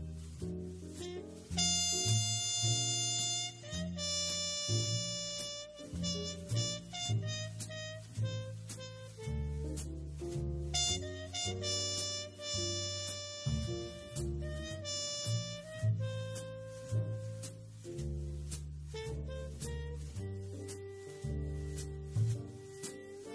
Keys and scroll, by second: 2.2 super+space, 14.2 shift+super+0, 16.8 super+x, 17.9 super+f.